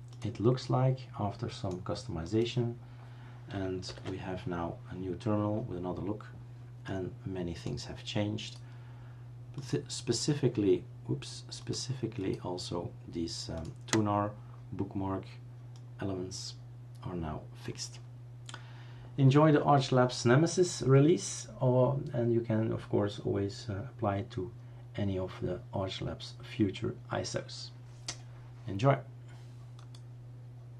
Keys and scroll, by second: 3.9 ctrl+alt+t.